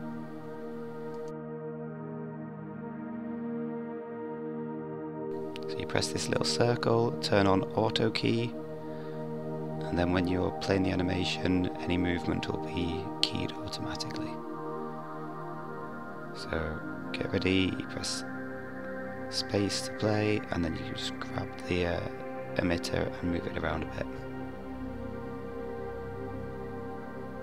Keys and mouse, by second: 0.8 KP_5, 1.7 KP_5, 2.6-3.7 middle drag, 18.8 space, 19.0 g, 24.3 click.